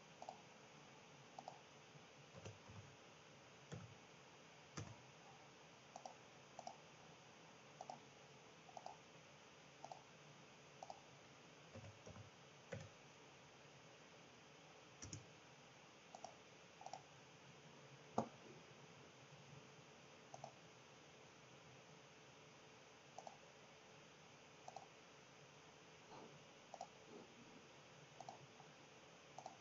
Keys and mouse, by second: 1.3-4.9 drag, 5.9-6.8 drag, 7.7 click, 8.7-9.9 drag, 10.8-15.2 drag, 16.1-17.0 drag, 20.3-22.1 drag, 23.2-25.6 drag, 28.2-29.6 drag.